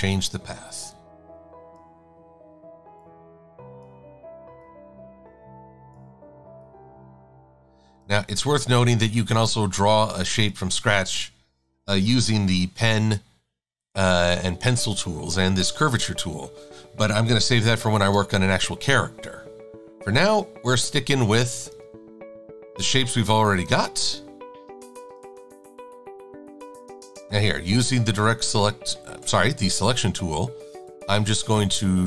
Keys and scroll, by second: 18.0 shift+super+a, 22.2 e, 31.3 v.